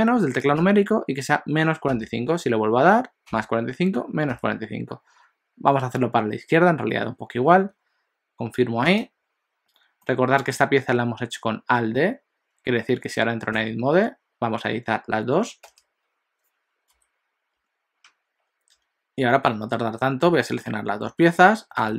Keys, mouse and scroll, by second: 10.0 middle click, 13.6 Tab, 16.9 KP_7, 20.6 shift+click, 21.8 alt+d.